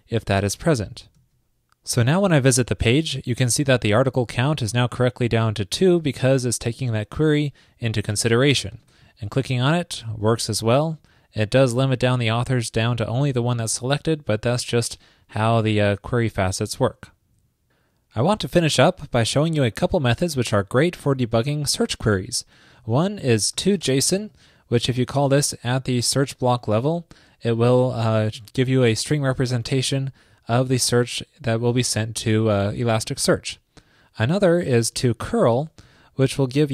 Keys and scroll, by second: 1.2 super+s, 25.0 alt+shift+Left, 35.2 shift+super+Right.